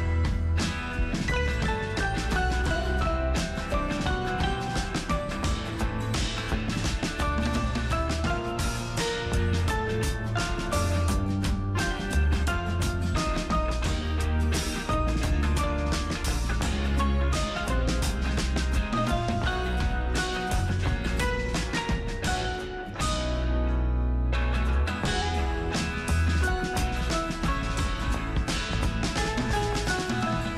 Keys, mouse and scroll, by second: 0.1-16.9 ctrl+super+drag, 16.9 super+Return, 19.1-21.4 super+drag, 21.4 super+Return, 24.4 super+Return, 24.7 ctrl+super+j, 27.3-29.7 super+drag.